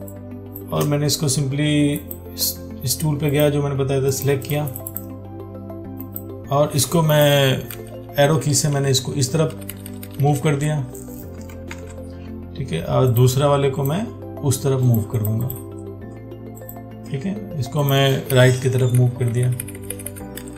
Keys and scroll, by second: 12.0 ctrl+d.